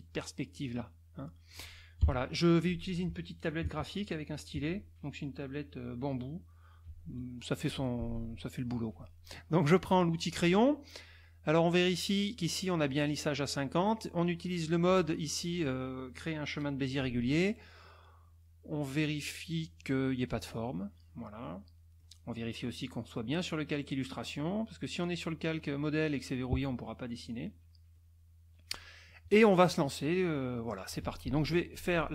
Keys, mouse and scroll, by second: 1.2 middle click, 2.0 KP_Subtract, 9.8 click, 21.4 middle click, 24.9 click, 27.1 click, 27.9-29.3 middle drag, 30.2 middle click.